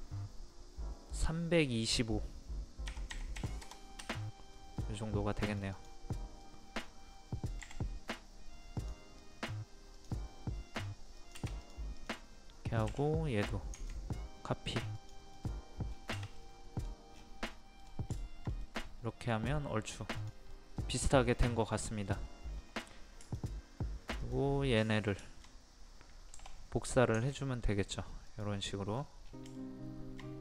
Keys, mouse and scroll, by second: 2.9 KP_3, 4.6 middle click, 5.5-7.5 drag, 7.6 p, 8.8 click, 12.3 scroll up 1, 12.9 typing, 13.7 ctrl+click, 15.3 middle click, 15.9 scroll down 1, 16.4 middle click, 16.8-17.1 scroll down 1, 17.2 scroll up 1, 17.4 scroll down 1, 17.5-17.8 scroll up 1, 17.8 scroll down 1, 18.2 shift+middle click, 20.2 click, 20.5 middle click, 21.3-21.8 scroll up 1, 21.8 middle click, 22.1-22.5 scroll down 1, 24.2 shift+click, 24.8 shift+click, 25.2 shift+middle click, 26.3 m, 27.2 ctrl+click, 28.7 middle click, 28.9-29.2 scroll down 1, 29.6 shift+middle click.